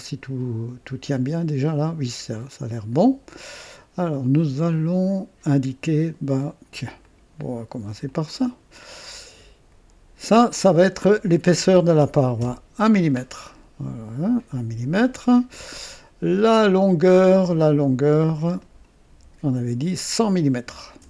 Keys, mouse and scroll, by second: 1.1-3.6 drag, 4.3 scroll up 1, 4.6 right click, 7.0 click, 8.1 click, 10.2 click, 11.6 KP_1, 12.4 KP_Enter, 13.2 scroll down 1, 14.4 click, 15.4 right click, 18.6 click, 19.8 click, 20.7-21.0 typing.